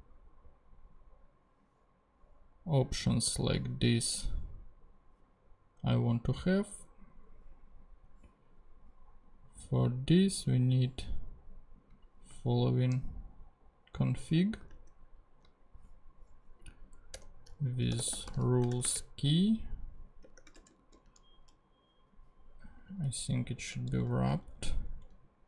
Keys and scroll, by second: 12.5 super+c, 14.7 super+Tab, 17.1 Return, 17.7-20.2 typing, 20.5 shift+Return, 20.8 super+v, 23.4 Left.